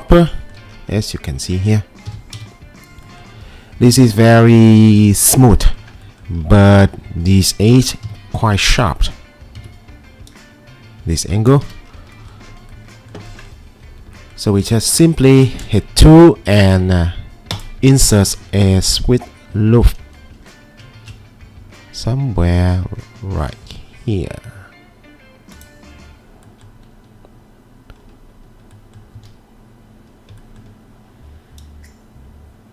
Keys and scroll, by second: 1.8-2.9 typing, 8.1 g, 9.6 ctrl+2, 11.6 Escape, 15.3 2, 29.2 w.